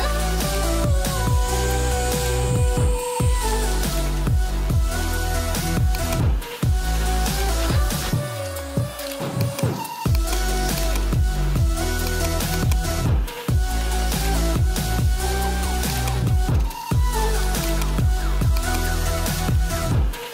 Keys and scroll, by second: 5.2 Return.